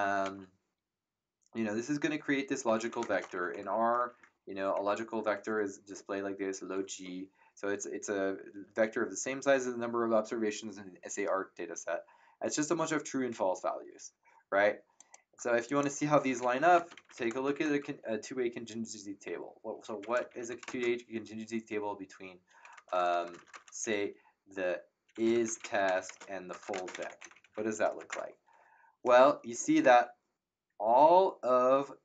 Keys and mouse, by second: 2.4-4.7 typing, 4.7 Return, 14.9 click, 16.3-17.9 typing, 19.6-21.1 typing, 22.7 BackSpace, 25.0-28.1 typing.